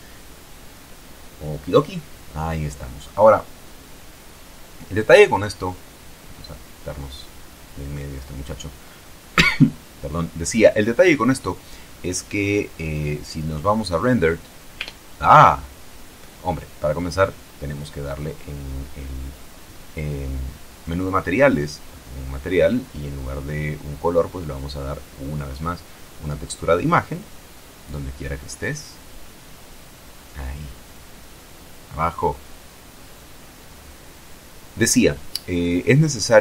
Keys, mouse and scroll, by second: 1.3 click, 2.4-3.1 scroll down 2, 3.1-3.4 scroll down 1, 7.9-9.7 drag, 10.8 Tab, 12.4 click, 14.0 click, 19.3 click, 20.1 middle click, 21.4 click, 22.2 click, 25.4 click.